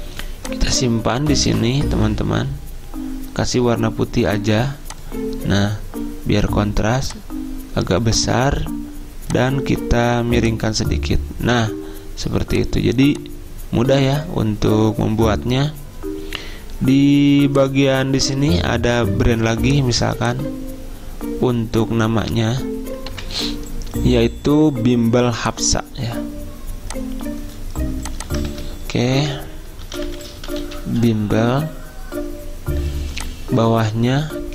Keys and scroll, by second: 23.2 F10, 23.4 F10, 28.6 ctrl+a, 30.0-31.2 typing.